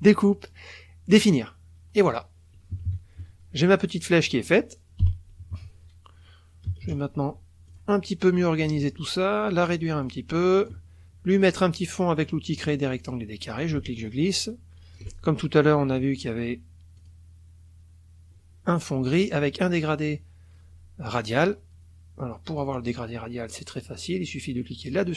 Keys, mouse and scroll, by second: 1.1 click, 2.0 click, 2.7 KP_Subtract, 2.9 click, 4.1 click, 5.0 Delete, 5.4 KP_Subtract, 6.7 KP_Add, 7.7 click, 8.9-9.9 ctrl+drag, 10.0 ctrl+click, 12.6 click, 13.6-15.1 ctrl+drag, 17.0 click, 22.6 click, 24.8 click.